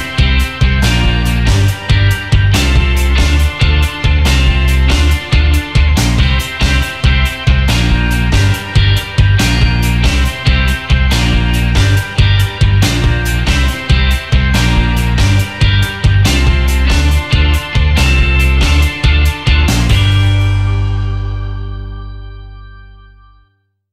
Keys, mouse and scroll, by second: 0.1 m, 2.6 alt+scroll up 1, 3.3 alt+scroll down 1, 4.4 alt+scroll down 2, 5.3 v, 7.1 double click, 9.2 ctrl+x, 12.3 ctrl+f, 13.1 ctrl+f, 13.2 alt+scroll down 1, 13.5 space, 13.9 alt+scroll down 1, 14.4-15.0 alt+scroll up 1, 16.3 alt+scroll up 1, 18.4 alt+scroll down 1, 19.4-19.8 alt+scroll up 1, 20.2 space, 22.1 alt+scroll down 1, 23.4 Delete.